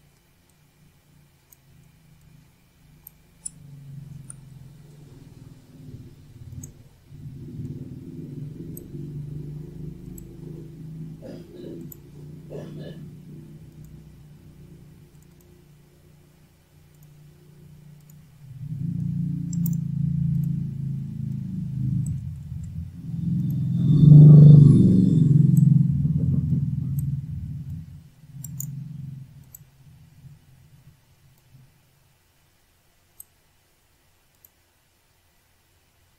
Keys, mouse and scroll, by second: 1.5 shift+click, 5.3 shift+click, 7.1 click, 9.3 click, 10.3 shift+click, 11.5 click, 13.7 click, 15.9 shift+click, 17.9 Delete, 20.0 click, 21.1 click, 23.4 click, 25.1 click, 26.9 click, 28.2 click, 28.4 click, 30.0 click, 33.2 click, 34.2 click.